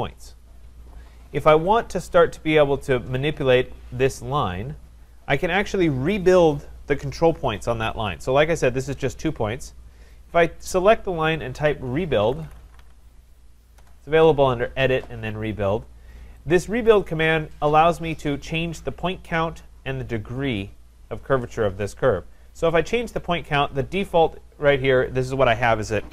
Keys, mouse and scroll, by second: 11.9-13.3 typing, 13.8 Return, 16.9-22.0 drag, 23.2-26.1 drag.